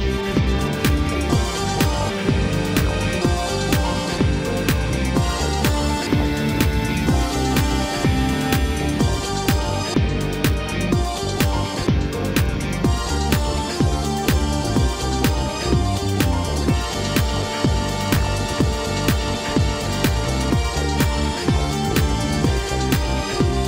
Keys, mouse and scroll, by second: 0.9-2.3 scroll up 1, 2.3 e, 6.4-7.5 middle drag, 7.5 scroll up 1, 8.4 click, 9.0 shift+click, 9.9 KP_1, 12.1 e, 14.6 scroll down 3, 15.8 click, 16.6 shift+click, 17.4 KP_1, 18.8 e.